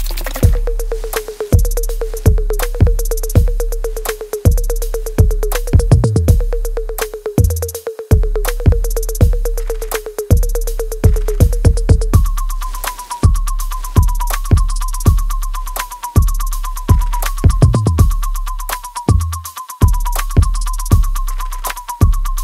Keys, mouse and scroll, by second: 7.2-9.9 ctrl+drag, 13.6-22.4 ctrl+drag.